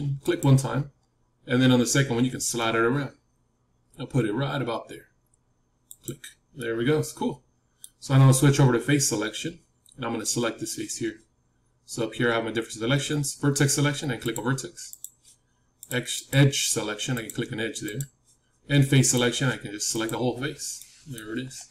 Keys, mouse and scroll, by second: 6.5-8.6 middle drag, 14.1-21.7 drag, 20.7-21.7 middle drag.